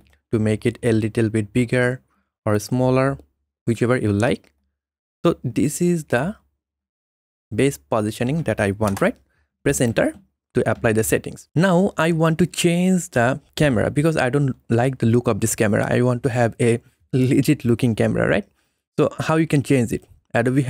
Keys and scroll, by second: 8.9 Return.